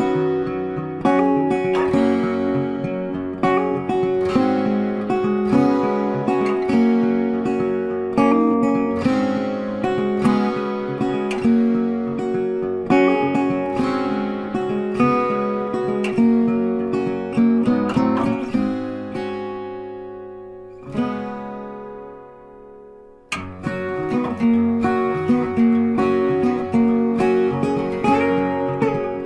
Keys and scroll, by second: 16.2 ctrl+t.